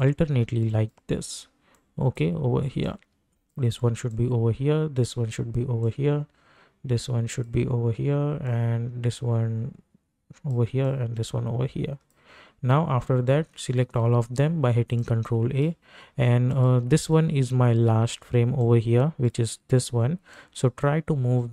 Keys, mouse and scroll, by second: 13.8 ctrl+a, 15.0-21.5 drag.